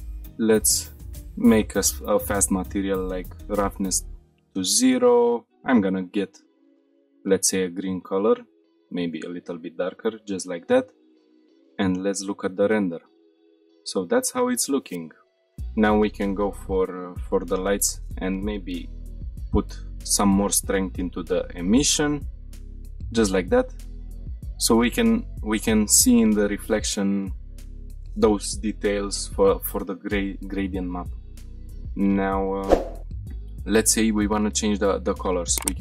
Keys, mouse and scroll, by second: 0.5 click, 1.2 click, 1.8-3.2 scroll down 3, 3.2 click, 4.2 scroll up 1, 4.8 click, 9.4-9.8 scroll down 2, 9.9 shift+middle click, 10.5-11.0 scroll down 3, 11.0 shift+middle drag, 11.2 scroll up 4, 11.4 middle drag, 11.8-12.1 shift+middle drag, 12.2-12.6 middle drag, 12.8 scroll up 1, 13.1 shift+middle click, 13.3 click, 13.3 scroll down 1, 13.8-14.2 shift+middle drag, 14.3-15.2 middle drag, 15.2 click, 16.6 click, 17.8-19.7 drag, 21.3-22.6 drag, 22.6-22.9 shift+middle drag, 22.9-23.5 middle drag, 23.5-24.3 scroll up 4, 24.5-25.1 shift+middle drag, 31.3 scroll down 2, 31.5 shift+middle drag, 31.9-32.3 middle drag, 32.5 shift+middle drag, 32.9-33.2 scroll down 3, 33.2 shift+middle drag, 33.6-34.0 scroll down 2.